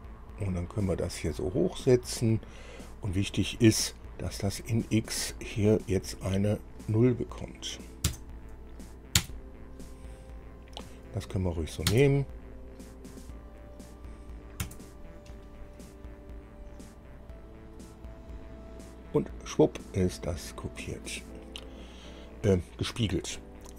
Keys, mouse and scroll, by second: 8.3 KP_0, 9.4 KP_Enter, 12.1 KP_Enter, 14.8 KP_Enter.